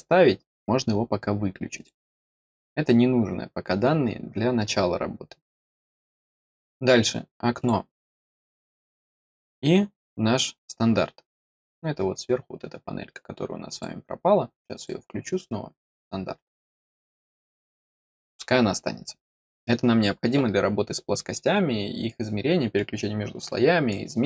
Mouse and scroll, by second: 1.7 click, 6.4 click, 7.5 click, 11.4 click, 13.6 click, 14.7 click, 16.5 click.